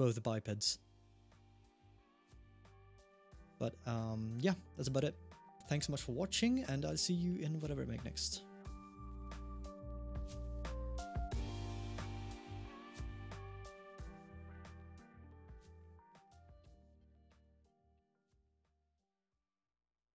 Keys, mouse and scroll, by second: 0.4 middle click, 1.1 g, 7.0-7.8 scroll down 1, 7.8 middle click.